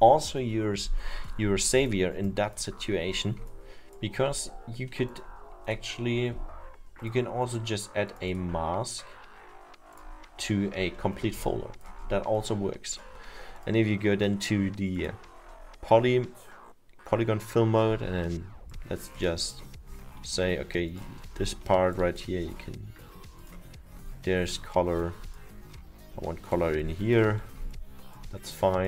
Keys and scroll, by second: 26.5 alt+7.